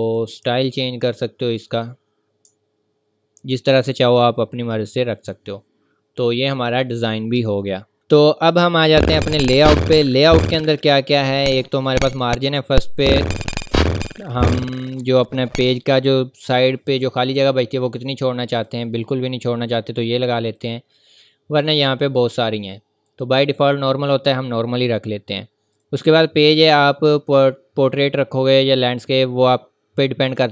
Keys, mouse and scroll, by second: 2.6 scroll up 1, 2.9 v, 3.1 scroll up 1, 3.2 v, 4.2-4.7 scroll up 1, 8.0 click, 11.3 click, 18.5 click, 22.6-23.1 scroll up 1, 23.7 click, 30.3 click.